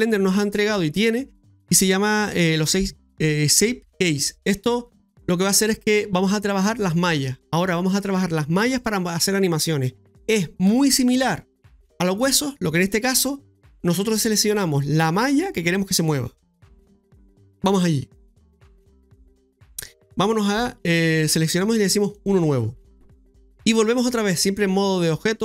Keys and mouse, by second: 22.1 click.